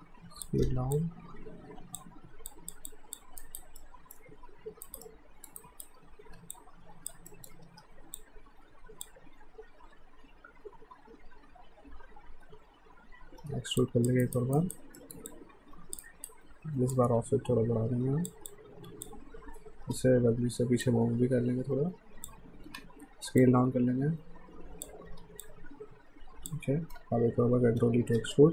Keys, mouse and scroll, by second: 0.7 w, 1.0 click, 2.5 alt+click, 3.4 alt+right click, 3.8 alt+middle click, 4.8 right click, 5.0 middle click, 5.6 right click, 6.2 r, 6.5 click, 7.3 alt+middle click, 7.6 w, 8.2 click, 13.4 e, 13.8 click, 14.2 right click, 15.0 middle click, 15.3 click, 16.0 right click, 16.9 click, 18.5 click, 19.9 w, 20.8 click, 22.7 r, 23.4 click, 25.1 w, 25.4 click, 27.8 e.